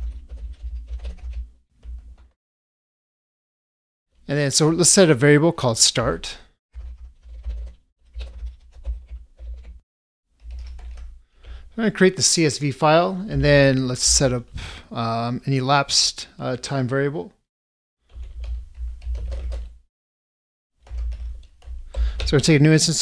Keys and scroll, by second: 8.8 ctrl+space.